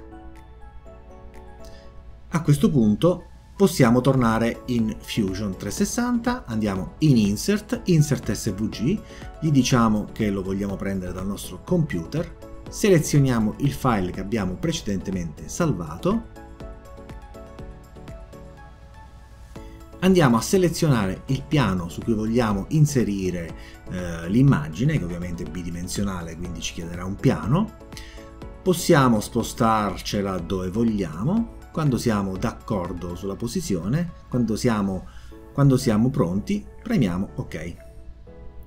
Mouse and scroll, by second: 0.8 click, 3.6 click, 6.2 click, 7.6 click, 14.4 click, 16.1 click, 18.9 click, 26.3 click, 29.2-33.7 drag, 36.8 click.